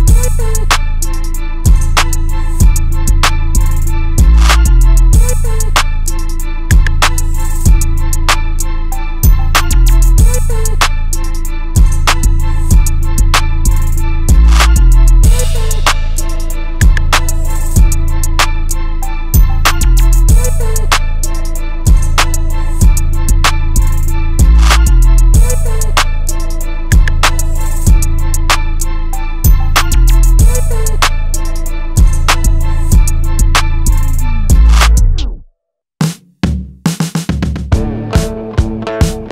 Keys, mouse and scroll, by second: 0.6 alt+g, 1.3 click, 2.4-4.8 typing, 5.0 Return, 6.6-8.8 drag, 9.6 alt+click, 12.9-21.9 drag, 25.8-27.3 drag, 32.1-39.3 drag.